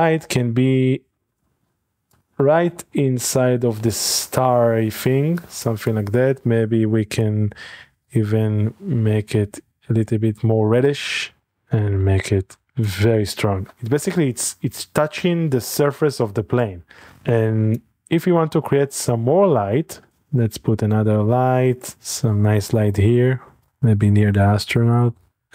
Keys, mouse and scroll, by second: 0.7 click, 0.9-2.0 drag, 1.1-3.7 scroll up 3, 1.7-2.3 shift+middle drag, 2.1 shift+click, 2.3 click, 3.4-4.6 middle drag, 3.7 g, 3.9 x, 5.7 click, 7.2-13.5 drag, 13.5 scroll down 1, 17.1-18.2 drag, 18.7 middle click, 18.9-19.3 scroll down 1, 19.7 shift+middle click, 20.1 a, 21.2-22.3 drag, 22.3 typing, 23.7 click, 23.9 click, 23.9 typing, 25.2 click.